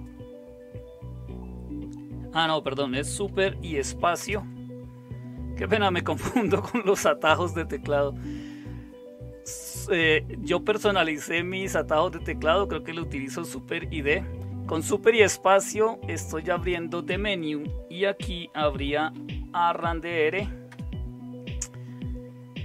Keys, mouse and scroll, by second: 4.1 super+space, 18.5-20.0 typing, 20.6 Return.